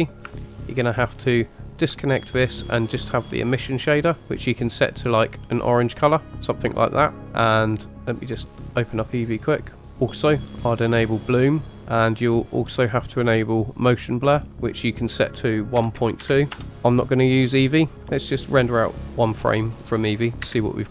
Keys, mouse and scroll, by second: 1.4 ctrl+right click, 2.9 click, 3.6 click, 7.9-9.0 drag, 9.8 scroll down 2, 10.8 click, 13.2 click, 14.0 click, 14.9-16.6 drag.